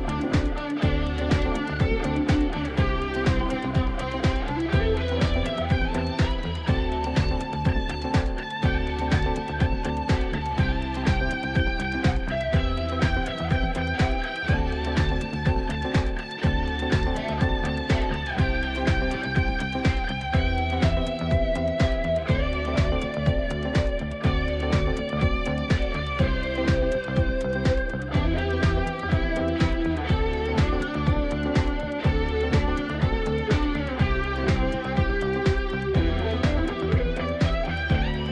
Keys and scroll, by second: 18.1 ctrl+d, 28.5 ctrl+d.